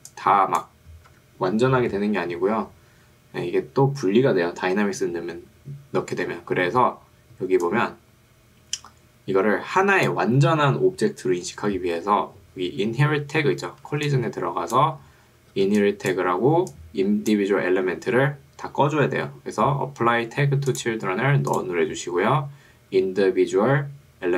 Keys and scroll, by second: 1.1 Escape, 6.7 ctrl+2, 10.5 Escape, 14.1 2, 14.9 Escape, 15.7 ctrl+2, 17.7 Escape.